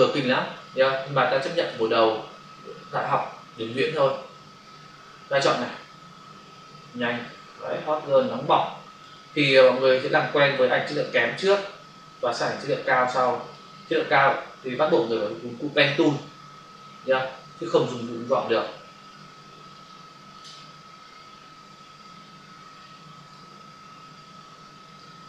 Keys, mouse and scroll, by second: 0.0 click, 0.2 space, 0.6 space, 2.3 w, 3.5 [, 5.0 typing, 5.7 click, 11.0 click, 14.2 [, 16.1 click, 21.9 click, 25.0 click.